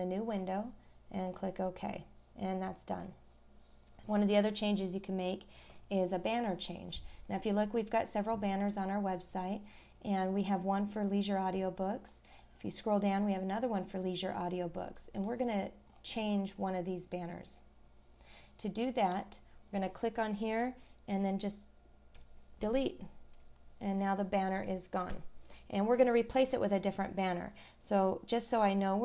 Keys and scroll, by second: 6.5-6.9 scroll down 1, 8.7 scroll up 1, 12.0-12.5 scroll down 1, 14.8 scroll up 1.